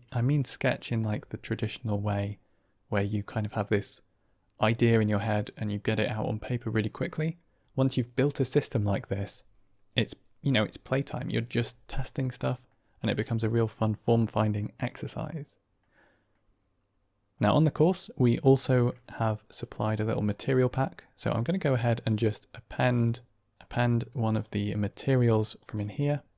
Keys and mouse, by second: 0.1-0.8 middle drag, 11.9-12.6 middle drag, 13.1-13.6 middle drag, 14.0-14.5 middle drag, 14.8-15.7 middle drag, 16.2-17.2 middle drag, 22.0-23.0 drag.